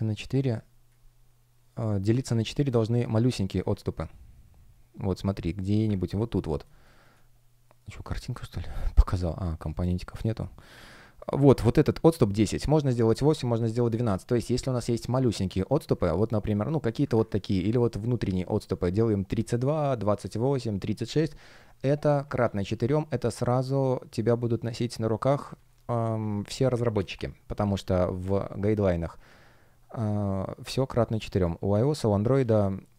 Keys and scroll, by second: 6.5-9.4 typing, 22.4 space, 29.0 space.